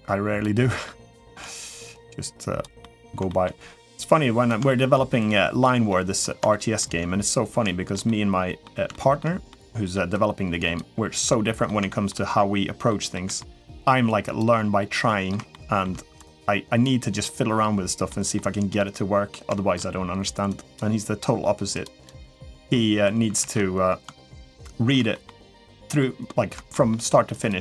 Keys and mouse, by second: 0.4 middle click, 0.9 shift+middle click, 1.4-2.4 drag, 2.6 middle click, 3.1 shift+middle click, 3.7 click, 4.5 shift+middle click, 5.0 click, 5.7 middle click, 6.3 shift+middle click, 7.4 shift+middle click, 7.8 middle click, 8.7 shift+middle click, 9.3 middle click, 9.9 click, 11.1 middle click, 11.7 shift+middle click, 12.7 middle click, 13.2 shift+middle click, 13.8 click, 14.6 middle click, 15.3 shift+middle click, 16.0 click, 17.9 middle click, 18.6 middle click, 19.3 shift+middle click, 20.3 click, 21.6 click, 22.3 middle click, 23.2 ctrl+z, 24.4 shift+middle click, 24.9 middle click, 25.8 middle click, 26.5 shift+middle click, 27.1 click.